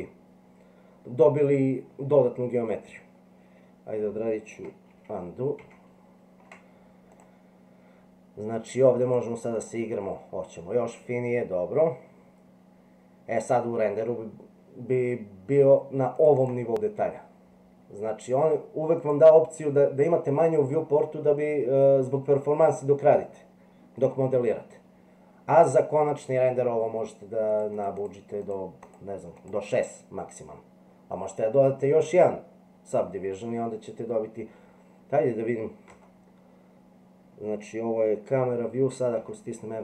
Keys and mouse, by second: 4.9 ctrl+z, 5.6 ctrl+z, 7.1 click, 9.0 click, 9.5 click, 16.3 click, 19.0 click, 23.0-24.0 middle drag, 27.5 click, 27.8 click, 28.0 click, 28.4 click, 28.9 click, 29.4 click, 35.9 KP_0.